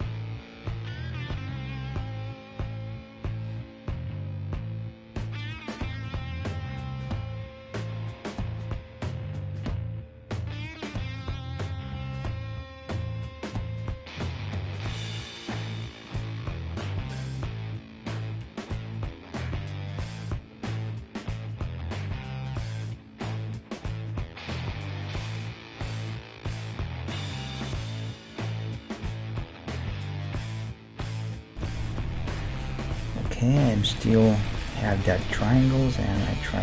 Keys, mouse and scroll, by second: 0.5 g, 2.1 scroll down 1, 2.4-4.2 middle drag, 4.2-11.7 right drag, 4.5 g, 5.5 g, 7.0 g, 8.1 g, 9.0 g, 9.5-18.2 middle drag, 10.2 g, 13.0-14.7 right drag, 14.9 right click, 15.5 g, 17.2 g, 18.2-18.8 scroll up 1, 19.7-21.4 middle drag, 20.0-23.0 right drag, 20.3 g, 21.6 g, 22.6-24.7 middle drag, 23.5 ctrl+Tab, 24.1-26.4 right drag, 26.3 middle click, 27.7-33.2 middle drag, 33.4-36.6 middle drag.